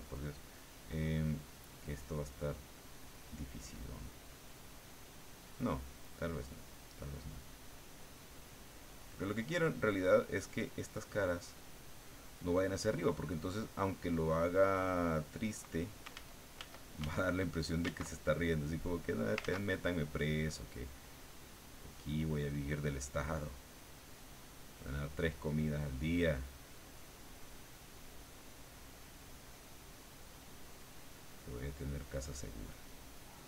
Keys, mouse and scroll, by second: 2.2 click, 3.3 click, 5.8-6.9 drag, 7.3-8.8 drag, 9.7 click, 10.7 click, 11.6 click, 12.4 click, 13.0 click, 13.5 click, 14.8 click, 16.1 ctrl+z, 17.9 ctrl+z, 18.9 middle click, 19.4 ctrl+z, 19.9 ctrl+middle click, 21.4-22.4 drag, 23.3-24.8 drag, 25.4 click, 26.7 click, 28.9 click, 31.2 click, 32.8 click.